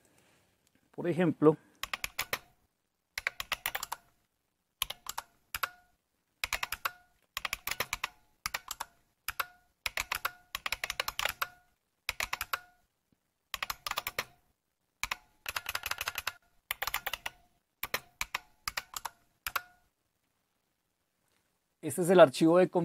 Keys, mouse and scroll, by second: 0.0-1.8 drag, 1.6-19.9 typing, 9.3 Return.